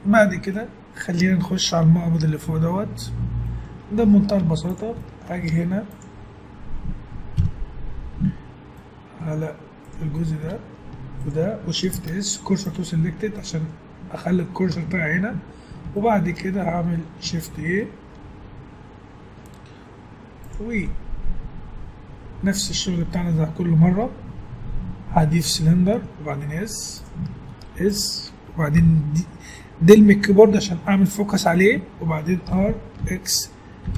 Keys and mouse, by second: 4.4 Tab, 5.5 ctrl+Tab, 7.4 KP_1, 11.9 shift+s, 14.7 Tab, 17.5 shift+a, 21.8-25.8 middle drag, 25.9 s, 27.3 s, 28.8 KP_Decimal, 30.4-32.4 middle drag, 32.7 r.